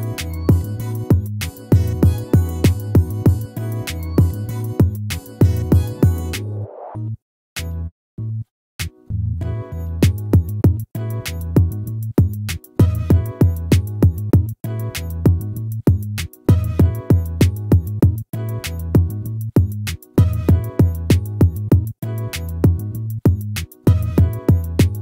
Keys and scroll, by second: 4.6 ctrl+-.